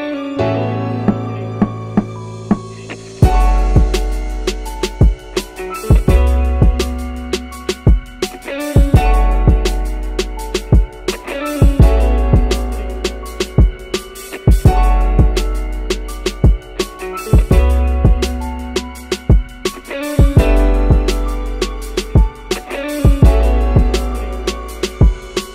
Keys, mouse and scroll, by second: 0.5-2.1 middle drag, 2.4 click, 2.8-3.5 scroll down 2, 4.1 click, 5.1 shift+d, 5.9 x, 7.4 click, 8.4 click, 9.5-10.4 drag, 10.6-11.5 middle drag, 12.4 click, 13.0-15.2 drag, 15.8 scroll up 1, 16.6-17.2 drag, 18.3 click, 19.1-19.8 middle drag, 19.1-19.8 scroll up 1, 20.8 click, 21.4-22.6 middle drag, 23.6-25.5 drag.